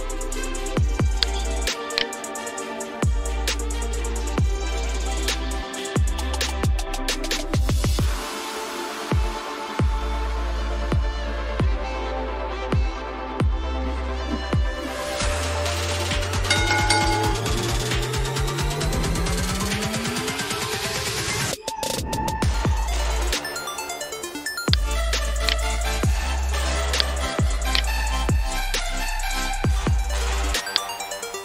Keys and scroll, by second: 4.2 ctrl+shift+6, 4.8 ctrl+shift+5, 5.4 ctrl+shift+4, 6.0 ctrl+shift+3, 6.9 ctrl+shift+2, 7.8 ctrl+shift+1, 8.9 ctrl+shift+8, 9.5 ctrl+shift+9, 10.6 ctrl+shift+1.